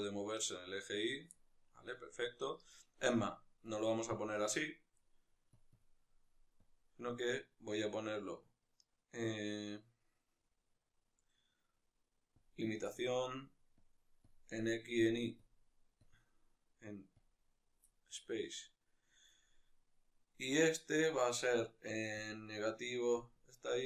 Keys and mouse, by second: 0.9 right click, 1.0-5.4 middle drag, 5.4 click, 12.3-14.1 drag, 17.1-23.1 drag.